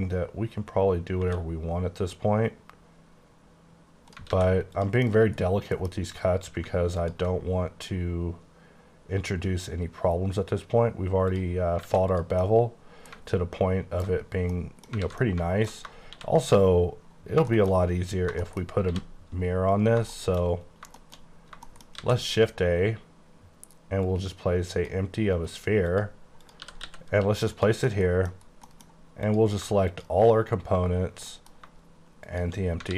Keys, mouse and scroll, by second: 1.3 space, 4.4 alt+a, 4.8 click, 5.1 middle click, 5.5 scroll up 1, 5.8 alt+m, 7.1 ctrl+click, 7.4-9.6 scroll up 5, 9.6-10.1 scroll up 1, 10.4-11.4 scroll up 1, 11.4 click, 11.8 scroll down 1, 11.9 alt+a, 12.2 click, 12.5 middle click, 13.2 KP_1, 13.7 KP_1, 13.8 KP_1, 14.1 KP_1, 14.4-14.8 scroll down 2, 14.6 middle click, 15.1 alt+a, 15.3 middle click, 16.2 shift+c, 16.8-18.3 scroll up 18, 17.6 shift+middle click, 18.7 shift+middle click, 18.9 shift+c, 19.5-20.0 scroll up 14, 20.0 scroll down 1, 20.2 middle click, 20.6-21.6 scroll up 7, 21.0 shift+middle click, 21.7 shift+middle click, 22.0 shift+a, 24.1 click, 25.4 right click, 25.9 click, 26.5 click, 26.7 typing, 27.6 click, 27.9 middle click, 28.4 scroll up 2, 28.7 middle click, 29.3 click, 31.4 middle click, 32.3 click.